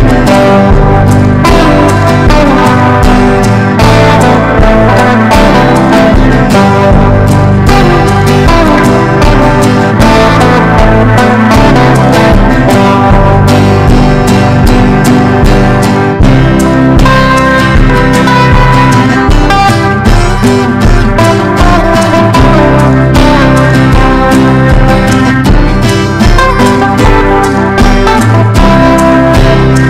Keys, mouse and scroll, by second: 1.7-8.3 typing, 8.9 right click, 9.4 click, 10.3-18.4 typing, 12.0 Return, 19.0 click, 20.0 ctrl+e, 21.1-29.8 drag.